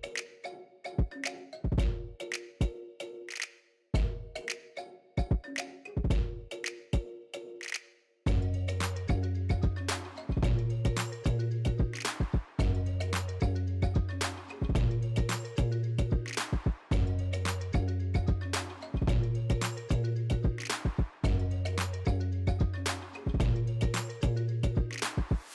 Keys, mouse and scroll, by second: 0.5 Tab, 0.6 KP_7, 1.0 alt+right click, 1.2-1.6 scroll up 5, 1.5 click, 11.9 alt+right click, 12.2-12.9 scroll up 1, 13.1 n, 13.6 Tab, 14.0 scroll down 4, 14.2 click, 14.6 click, 15.3 ctrl+right click, 15.8 click, 16.6 click, 16.8-17.5 scroll down 1, 17.5 scroll down 2, 18.4 click, 18.5-19.1 scroll down 1, 19.1 click, 19.1-19.4 scroll down 1, 19.4 F12, 20.6 right click, 20.9 shift+a, 22.3 ctrl+alt+KP_0, 22.7 n, 23.4 click, 23.9 n, 24.3 alt+right click, 25.2 F12.